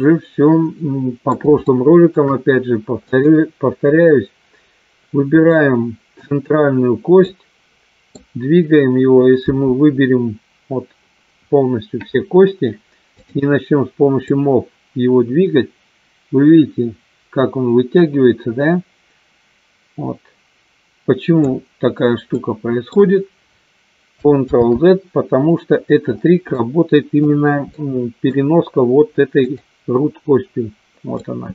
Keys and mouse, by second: 1.6 shift+middle click, 3.1 click, 5.5 middle click, 7.4 middle click, 13.2 click, 14.4-21.7 drag, 22.4 middle click, 25.2 ctrl+z, 26.5 middle click, 27.7 middle click, 29.4 click, 31.3-31.5 middle drag.